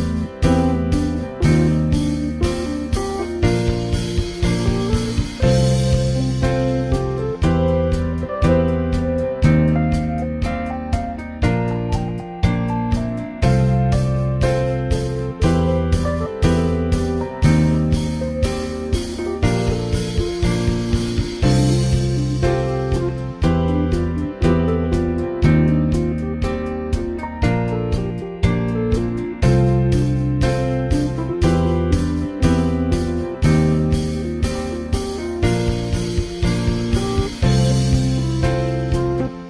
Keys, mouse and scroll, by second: 0.1-2.7 middle drag, 2.3-3.0 scroll down 2, 3.0 shift+middle click, 6.1 ctrl+space, 12.2 click, 14.7 middle click, 16.6 ctrl+space, 17.6 middle click, 20.6 click, 21.9-24.5 middle drag, 22.5-24.2 scroll up 3, 25.1-25.9 scroll down 2, 25.9 middle click, 26.4 click, 29.5 alt+x, 30.9-31.3 drag, 31.8 click, 34.6 alt+x, 35.6 click, 37.1 alt+x, 37.9 click, 39.0 alt+x.